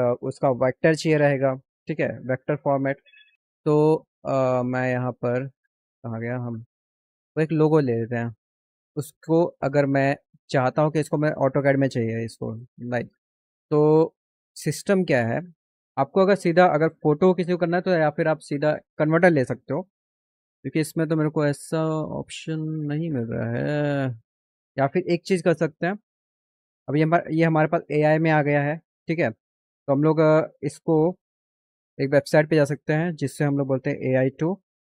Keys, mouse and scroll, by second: 2.3 click, 6.2 click, 7.4 click, 9.3 click, 10.2 click, 16.3 click, 18.0 click, 21.4 click, 30.8 click, 32.5 click, 33.9-34.9 typing.